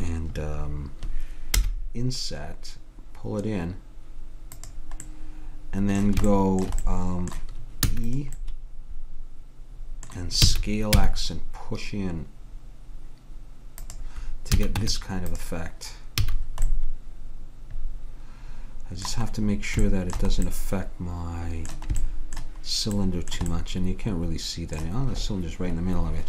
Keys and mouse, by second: 1.6 i, 5.3 middle click, 7.9 e, 10.6 s, 14.6 a, 14.8 Tab, 16.2 a, 19.4-23.9 middle drag, 23.9 middle click.